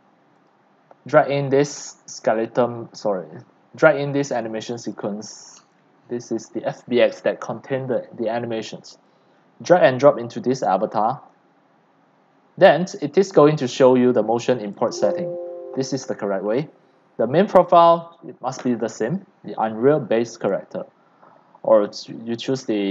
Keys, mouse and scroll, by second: 0.5-4.3 drag, 4.9-8.1 drag, 20.5-22.9 drag.